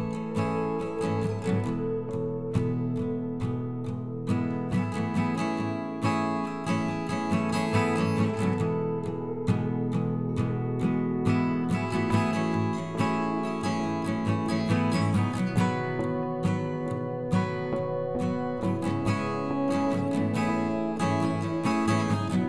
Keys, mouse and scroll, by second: 0.4 shift+click, 1.2 alt+x, 2.3 click, 2.7 ctrl+z, 4.0 alt+x, 4.4 click, 5.0 scroll down 1, 5.2 middle click, 5.6 scroll down 1, 6.2 KP_7, 6.6-6.9 scroll up 6, 7.0 shift+middle click, 7.4-7.8 scroll down 1, 7.8 click, 8.5 r, 9.9 middle click, 10.7-11.2 scroll down 1, 11.2 KP_3, 12.0-13.5 scroll up 1, 13.5 middle click, 14.3 KP_7, 14.8-16.1 shift+middle drag, 17.1 shift+a, 17.3-17.8 scroll down 2, 17.8 s, 18.9 KP_1, 19.3 scroll up 3, 19.7 s, 21.5 r.